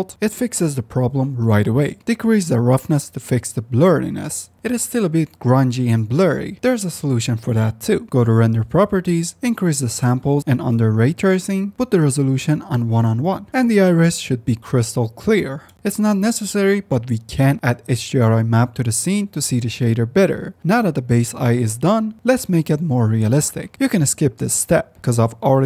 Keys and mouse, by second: 2.5-4.6 drag, 4.6 z, 7.4 click, 9.1 click, 9.5 ctrl+z, 12.0 click, 12.9-13.8 drag, 15.6 middle click, 15.9-16.2 drag, 16.8 shift+a, 17.0 e, 19.2 click, 20.4 ctrl+s, 20.9 click, 22.0 click, 23.9-24.5 drag.